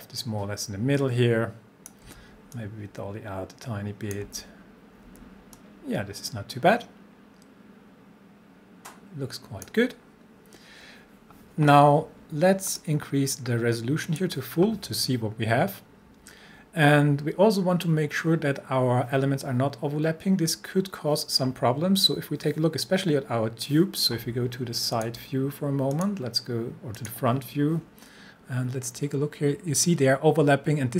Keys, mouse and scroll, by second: 2.0 c, 2.5-4.4 drag, 4.2 c, 5.1 c, 5.6-9.9 drag, 10.0 scroll up 1, 12.7 click, 24.9 click, 28.3 scroll up 1, 29.1 scroll down 1, 30.3 scroll up 1.